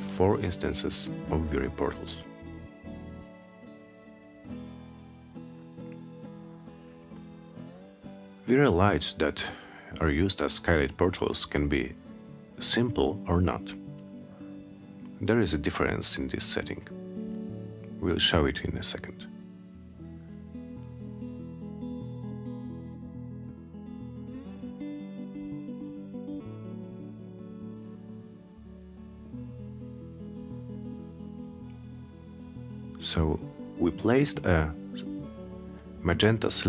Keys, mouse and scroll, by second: 4.3 click, 4.9-6.0 alt+middle drag, 9.4 click, 11.9 click, 20.9 click, 24.5 click, 25.4 click, 26.7 click, 31.8 click, 36.3 click.